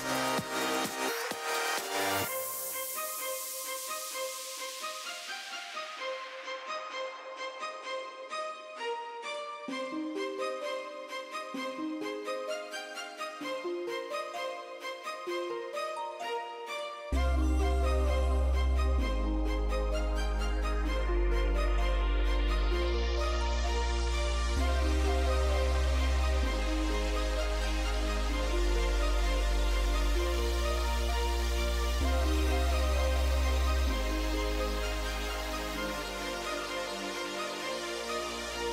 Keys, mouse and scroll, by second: 1.8 click, 2.4 z, 6.7-9.1 middle drag, 10.1 t, 11.8 n, 15.0 middle click, 15.8 middle click, 19.0 KP_0, 22.2-23.2 middle drag, 23.6 n, 27.7-34.0 drag, 34.0 KP_0, 34.9 KP_0, 38.1 click, 38.5 shift+z.